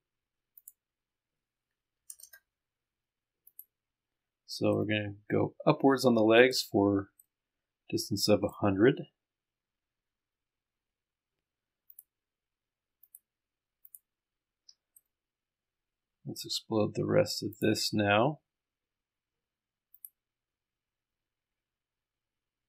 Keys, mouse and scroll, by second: 0.6 click, 2.1 KP_1, 3.5 click, 4.7 middle click, 4.9-7.1 drag, 7.2 middle click, 7.3-8.6 drag, 9.5-10.4 scroll up 1, 10.4-10.9 scroll down 1, 10.9-11.9 scroll up 1, 11.9 scroll up 1, 12.0 click, 13.1 ctrl+click, 13.9 ctrl+click, 15.1-16.4 right drag, 16.6-17.6 scroll up 1, 17.6 ctrl+click, 17.9-18.4 scroll down 1, 20.0 click.